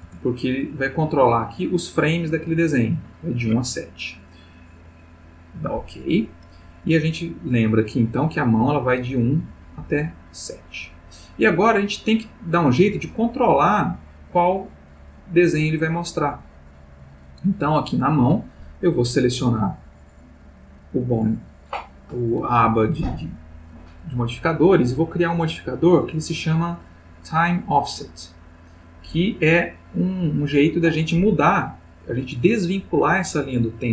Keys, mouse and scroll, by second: 0.0 Return, 4.8 click, 6.1 middle click, 7.4 click, 8.9-17.3 drag, 17.8 click, 19.2 click, 25.2 click, 29.6 click.